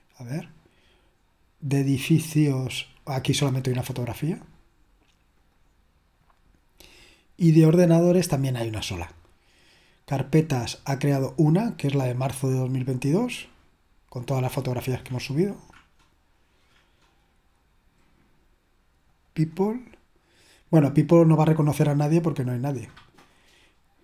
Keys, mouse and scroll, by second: 0.0 click, 2.2 click, 5.7 click, 5.9 click, 9.8 click, 11.8 click, 15.6-16.5 scroll down 3, 19.2 click, 22.6 click.